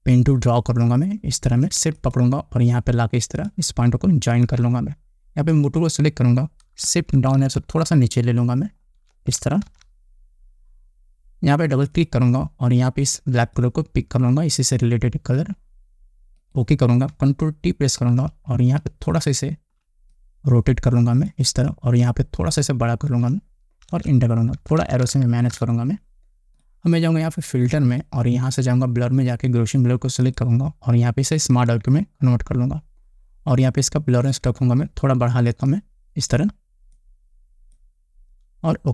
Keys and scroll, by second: 7.6 shift+Down, 10.2 Up, 18.3 ctrl+t, 24.4 Return, 25.0 Up.